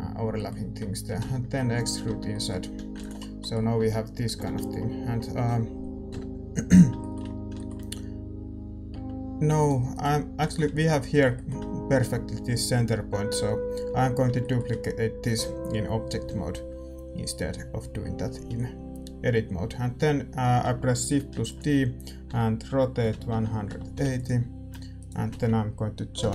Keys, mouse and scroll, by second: 1.0 e, 2.0 Tab, 2.6 a, 3.1 ctrl+s, 3.7 Tab, 4.2 a, 4.4 a, 6.0 KP_7, 6.9-9.9 middle drag, 8.9 Tab, 9.6-14.3 right drag, 10.2-21.3 middle drag, 21.3 shift+d, 22.2 r, 24.9-26.3 right drag, 26.2 ctrl+j.